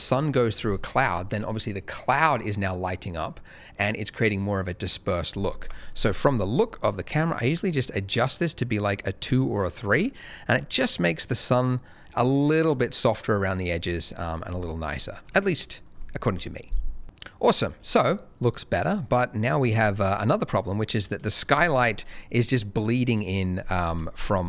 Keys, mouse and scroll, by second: 5.6 KP_0, 6.2 scroll up 1, 7.8 click, 10.1 scroll up 1, 13.8-14.2 scroll up 1, 14.2 scroll down 1, 15.0 shift+middle click, 15.2 shift+scroll up 1, 19.1 middle click, 19.6-20.5 scroll up 1, 20.5-20.8 scroll down 1, 20.8-23.6 scroll up 1, 24.0 ctrl+shift+a, 24.3 ctrl+shift+click.